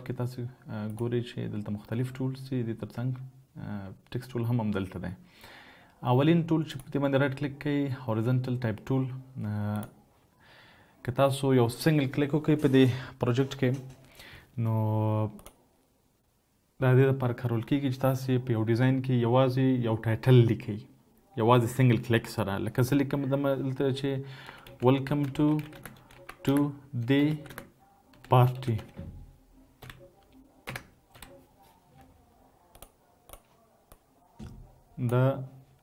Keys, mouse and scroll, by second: 5.8 right click, 23.6-27.8 typing, 28.9-30.2 typing.